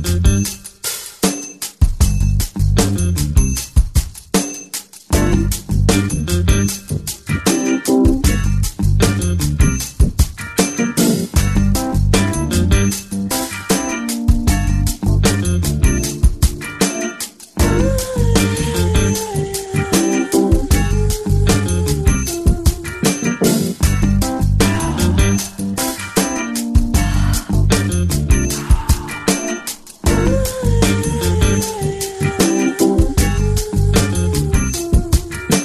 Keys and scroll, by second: 3.3 space, 20.9 space, 26.0 v, 26.3 space, 26.8 space, 28.6 space.